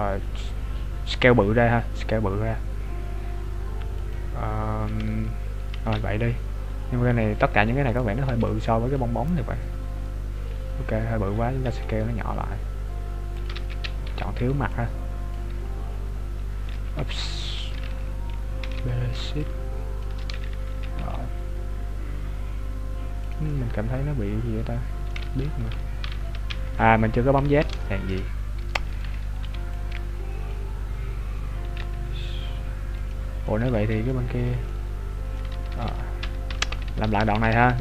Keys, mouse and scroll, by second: 6.2-7.9 scroll up 2, 7.9 right click, 8.3 b, 9.4-10.6 scroll down 7, 11.4 scroll up 6, 12.0 s, 13.7 ctrl+z, 14.1 b, 17.0 b, 17.5 right click, 18.7 b, 20.8 s, 23.7 middle click, 25.3 ctrl+z, 26.1 ctrl+z, 26.9 KP_3, 27.4 z, 28.2 shift+middle click, 28.9 right click, 29.4 b, 31.7 s, 33.5 middle click, 35.5-37.8 ctrl+z.